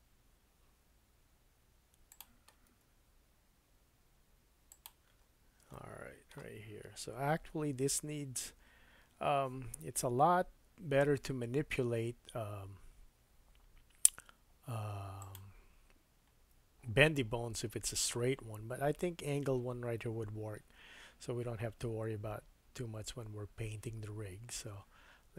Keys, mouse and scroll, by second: 2.7 g, 5.3-5.6 scroll up 3, 5.7 shift+middle click, 7.3 r.